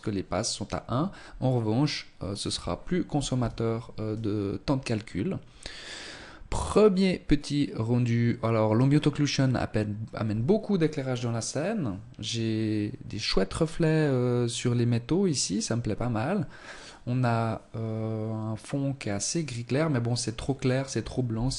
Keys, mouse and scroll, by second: 20.4 Escape, 21.1-21.4 scroll down 4.